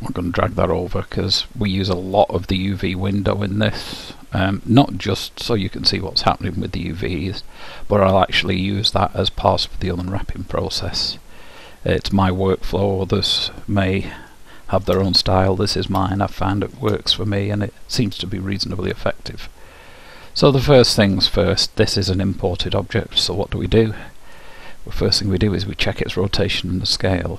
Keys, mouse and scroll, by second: 1.2-3.2 drag, 3.7-6.0 middle drag, 13.2 middle click, 14.3-19.1 middle drag, 23.4-25.4 drag.